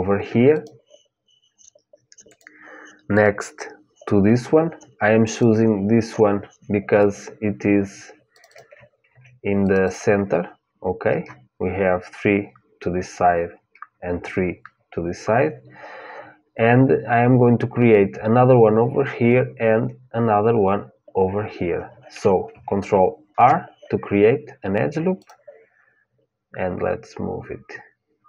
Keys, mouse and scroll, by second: 0.3-4.9 drag, 5.0-7.0 drag, 8.1-11.6 drag, 23.0 ctrl+r.